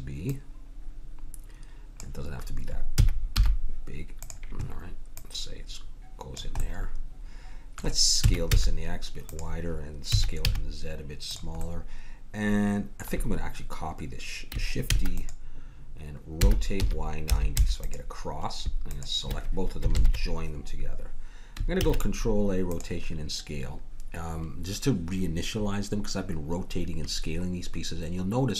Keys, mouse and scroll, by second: 0.2 click, 0.4 middle click, 1.1-2.9 drag, 2.9 s, 5.1-6.6 drag, 6.6 middle click, 6.8 click, 7.0-8.5 middle drag, 8.2 s, 10.1 s, 11.6 middle click, 14.9 shift+d, 16.4 r, 18.9-20.8 drag, 20.5 ctrl+j, 21.8 ctrl+a.